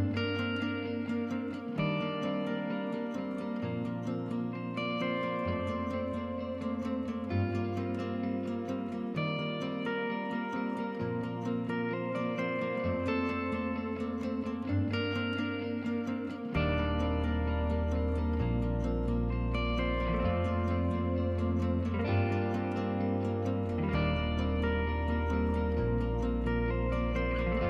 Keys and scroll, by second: 17.9-22.4 typing.